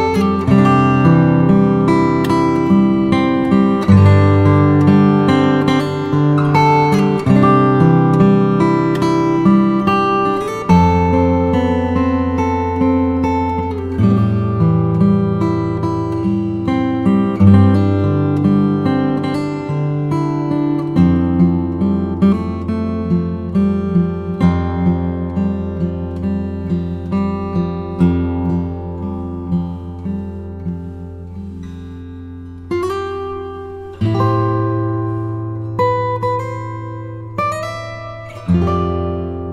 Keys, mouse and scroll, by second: 3.9 g, 4.3 z, 5.0 click, 5.4-6.1 middle drag, 6.3 Tab, 8.2 f, 9.4 e, 10.4 z, 11.5 z, 13.5 click, 13.9 e, 14.2 s, 16.4 click, 16.9 e, 18.7 click, 19.1 e, 19.3 s, 20.2 click, 20.6 e, 22.4 click, 22.6-23.7 middle drag, 23.8 3, 23.9 click, 24.7 e, 25.0 s, 26.1 click, 26.4 e, 27.3 click, 27.5 Tab, 27.7-30.0 middle drag, 30.0 ctrl+3, 30.4 middle click, 30.8 Tab, 31.3-32.4 scroll up 1, 32.4-33.7 middle drag, 32.4-32.8 scroll up 2, 33.9 ctrl+r, 36.9 ctrl+click, 37.4-38.8 middle drag, 38.8 ctrl+r.